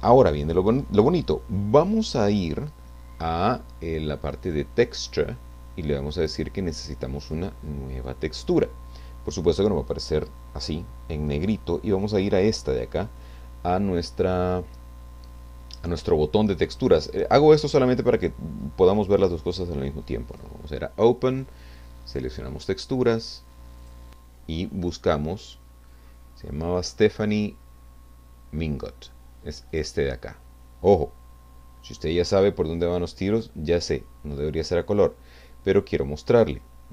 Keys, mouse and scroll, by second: 4.4 click, 7.2 click, 12.2 click, 20.3 click, 22.1 click, 23.8 click, 25.9-26.8 scroll down 4, 29.7 click, 31.8 click.